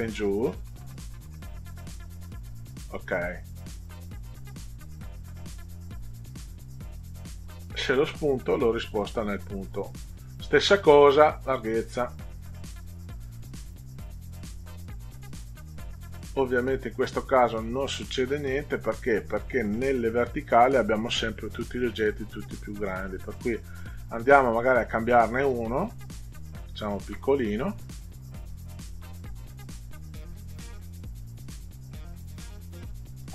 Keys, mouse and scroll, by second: 7.2 click, 8.2 click, 11.2 click, 13.4 click, 14.5 click, 23.1 click, 24.0 click, 24.8 click, 25.8 ctrl+click, 27.6 click, 30.2 click, 31.4 click.